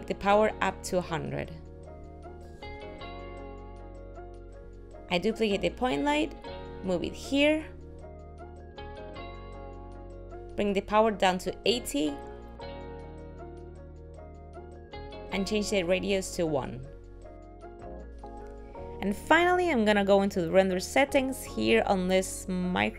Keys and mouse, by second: 1.7 click, 2.6 middle click, 3.1 g, 3.6 g, 4.7 KP_7, 5.5 shift+d, 8.9 middle click, 9.5 g, 9.8 middle click, 12.1 click, 16.9 click, 22.3 click.